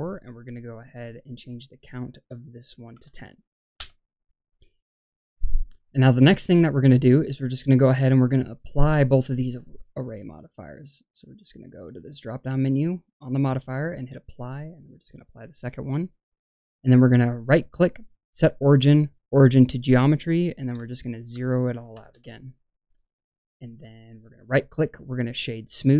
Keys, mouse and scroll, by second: 0.8-3.8 drag, 4.6 scroll down 1, 4.8 ctrl+z, 5.7 scroll down 1, 7.0-8.1 scroll down 1, 10.6-13.9 drag, 14.4-15.2 drag, 17.3-20.2 right drag, 20.2 drag, 20.8-22.1 shift+drag, 22.8-23.2 scroll up 2, 23.2-23.7 shift+middle drag, 24.1-25.2 right drag.